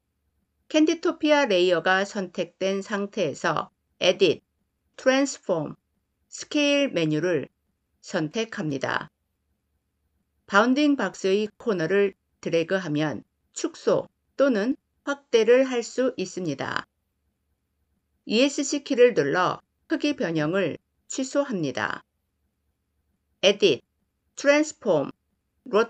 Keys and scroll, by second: 18.2 Escape.